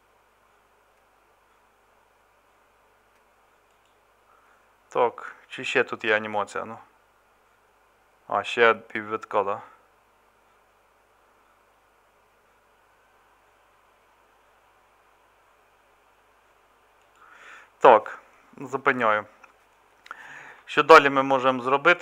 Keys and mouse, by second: 21.0-22.0 middle drag.